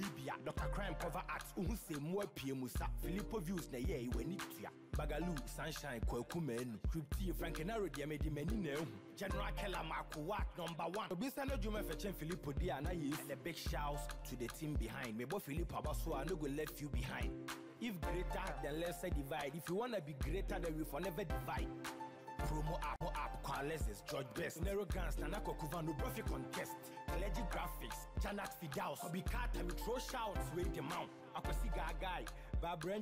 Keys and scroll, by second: 7.8 ctrl+Return, 9.1 Up, 9.8 shift+Left, 12.0 Left, 15.1 ctrl+0, 16.6 Right, 19.3 ctrl+t, 23.3 Return, 24.1 Down.